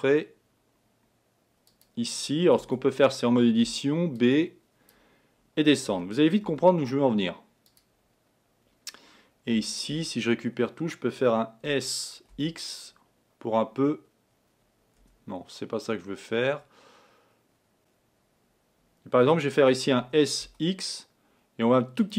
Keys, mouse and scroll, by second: 2.7 Tab, 3.8 b, 6.0 g, 9.6 a, 9.9 a, 11.7 s, 20.1 s.